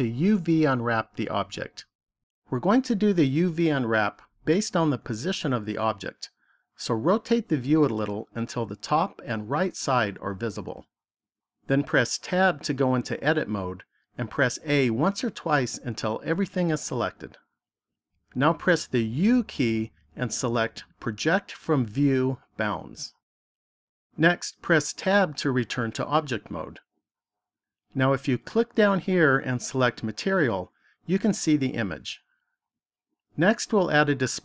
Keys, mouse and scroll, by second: 6.6 middle click, 12.1 Tab, 14.5 a, 19.0 u, 24.7 Tab, 29.2 click.